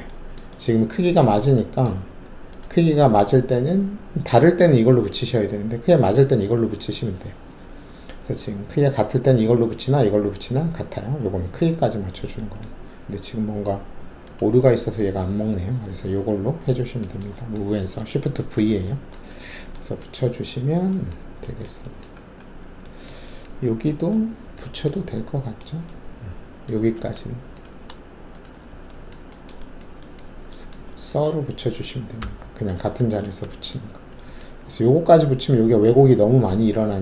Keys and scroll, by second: 22.2 alt+`, 26.9 alt+2, 32.2 shift+s, 34.0 alt+`.